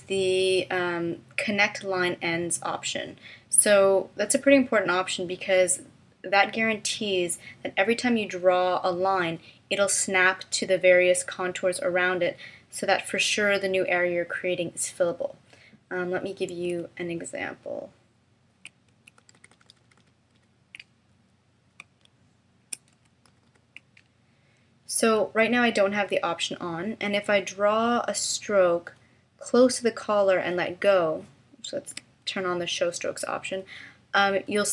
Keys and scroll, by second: 19.3 super+=, 21.8 space, 23.3 super+=, 31.9 d.